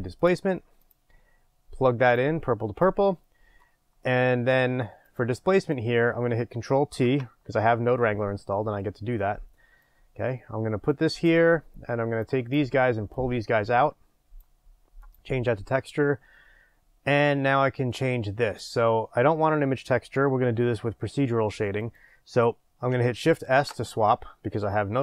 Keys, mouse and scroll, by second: 0.3 middle click, 0.3 shift+a, 0.9 click, 3.8-5.6 middle drag, 5.6 click, 7.0 ctrl+t, 8.8-12.2 middle drag, 12.2-15.1 drag, 16.3 scroll up 1, 18.6-25.0 drag.